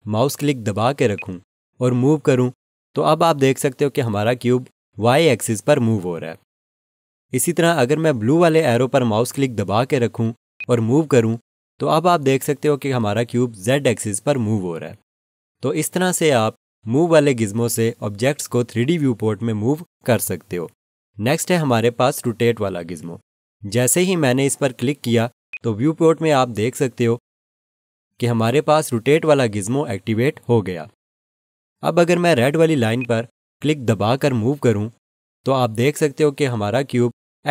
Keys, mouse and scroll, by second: 25.5 click, 32.9 click.